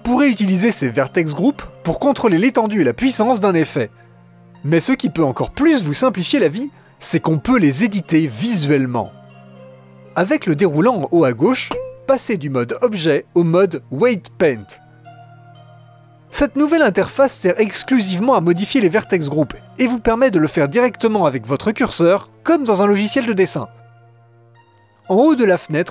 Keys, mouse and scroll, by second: 1.8 click, 2.5-13.2 middle drag, 13.2-15.5 drag, 15.5-17.0 middle drag, 17.3-21.0 middle drag, 21.0-22.5 drag, 23.5-25.9 drag.